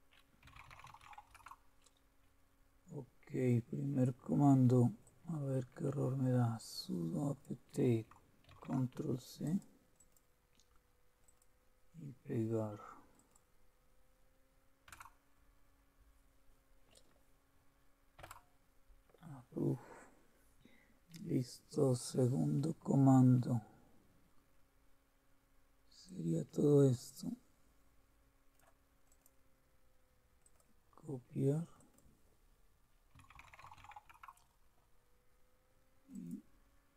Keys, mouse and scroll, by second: 0.2-1.5 typing, 5.0-8.4 drag, 8.5 ctrl+c, 9.5-10.6 drag, 11.3-12.5 drag, 13.1-14.3 drag, 14.9 Return, 18.2 Return, 26.0-28.6 drag, 30.4 click, 31.7 click, 32.9-34.3 typing, 36.1-36.9 drag.